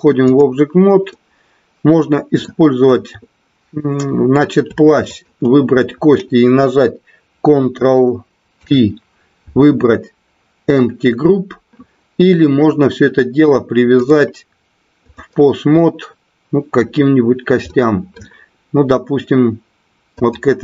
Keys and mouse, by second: 1.1-2.5 middle drag, 5.0 shift+click, 8.5 ctrl+p, 14.0-15.2 drag, 15.6-16.8 middle drag, 17.6-18.2 middle drag, 20.1-20.6 drag.